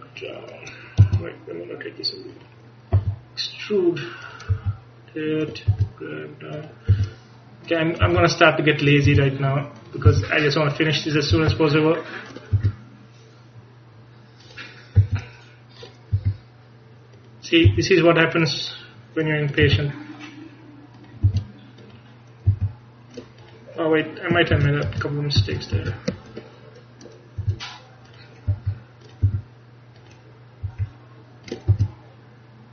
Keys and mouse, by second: 1.1 r, 3.0 e, 4.6 r, 6.1 g, 7.0 e, 8.1 r, 9.2 g, 10.1 e, 11.4 r, 13.1 g, 15.1 e, 16.3 r, 17.8 e, 19.7 r, 21.4 e, 22.6 r, 24.6 ctrl+z, 25.2 ctrl+z, 25.6 ctrl+z, 25.9 ctrl+z, 27.5 g, 28.6 r, 29.3 e, 30.8 r, 31.8 g.